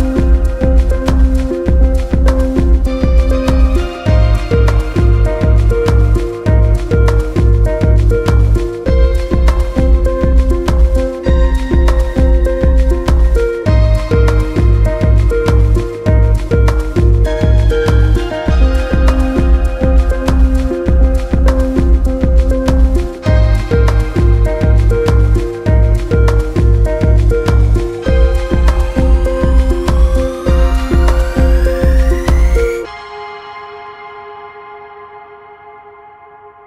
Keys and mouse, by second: 0.1 click, 7.9 drag, 8.5 click, 13.6 click, 14.5-16.4 drag, 17.8 click, 18.8 drag, 23.4-26.1 drag, 29.3 click.